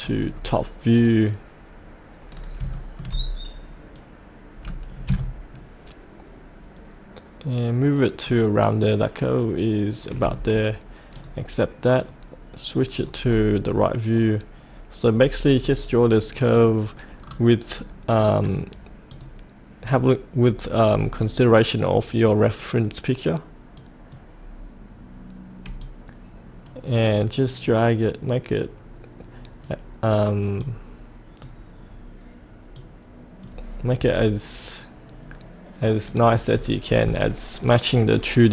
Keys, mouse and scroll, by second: 0.2-0.9 scroll down 1, 0.9 click, 2.3 scroll down 1, 2.7 shift+middle click, 3.9-10.8 drag, 13.2-14.0 scroll down 1, 14.0 click, 15.2-16.5 scroll down 2, 16.5 click, 17.2 scroll down 1, 18.2 click, 20.4-20.9 scroll down 1, 20.9-21.9 scroll up 1, 21.9-23.7 scroll down 1, 23.7-32.1 drag, 33.1-34.1 drag, 36.4-38.5 scroll down 1.